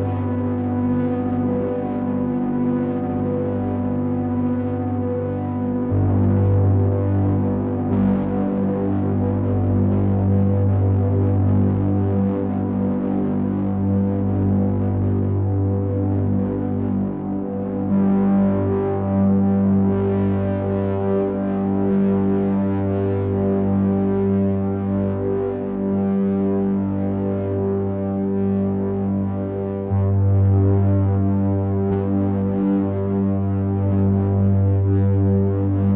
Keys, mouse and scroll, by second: 1.9 click, 4.1 click, 16.3 click, 21.3 click, 23.9 click, 27.8 click, 29.0 click, 31.5-32.0 scroll up 3, 32.2 middle click.